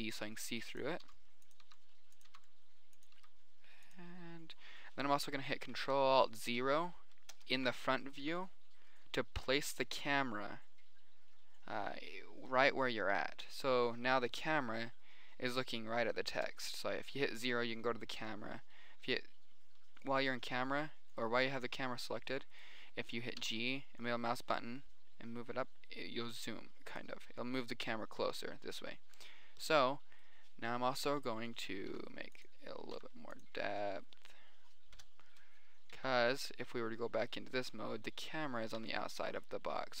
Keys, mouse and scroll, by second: 0.0-3.6 typing, 3.7 click, 6.7 middle click, 7.3 middle click, 7.7 ctrl+alt+KP_0, 11.5 middle click, 12.1 middle click, 13.3 middle click, 13.9 middle click, 14.5 middle click, 14.7 KP_7, 15.1 middle click, 15.7 middle click, 16.3 middle click, 16.8 KP_0, 17.5 middle click, 18.6 g, 18.7 middle drag, 19.3 middle click, 19.9 middle click, 20.5 middle click, 21.1 middle click, 21.7 middle click, 22.3 middle click, 23.9 g, 27.8-28.4 middle drag, 28.9 middle click, 29.5 middle click, 30.7 click, 31.3 KP_7, 31.9 click, 32.3 s, 33.1 middle click, 33.3 s, 33.7 middle click, 35.4 KP_0, 36.3 z, 37.9 middle click, 38.5 middle click, 39.2 s, 39.9-40.0 drag.